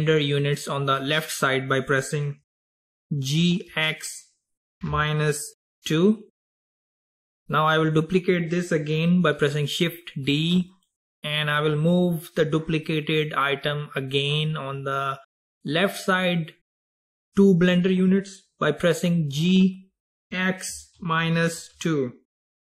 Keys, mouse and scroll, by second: 2.8 g, 10.3 shift+d, 19.4 g.